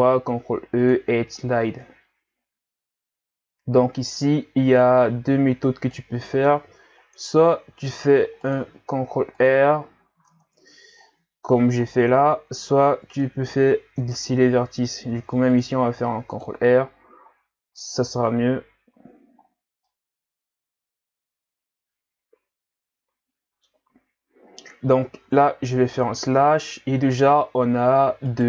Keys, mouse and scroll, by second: 0.1 ctrl+e, 6.5 Tab, 7.2 Tab, 8.0 ctrl+r, 9.8 scroll down 4, 10.3 Tab, 11.0-11.5 scroll down 4, 11.8 scroll down 2, 12.7-13.2 scroll up 2, 13.2 middle click, 13.6-14.0 scroll up 1, 14.0 Tab, 15.1 ctrl+r, 17.4-18.2 scroll down 6, 18.2 Tab, 18.9 a, 19.3-19.9 scroll down 4, 19.9-22.9 middle drag, 25.2 KP_Divide, 26.6-27.3 scroll down 1, 27.3 scroll up 2, 28.3 right click.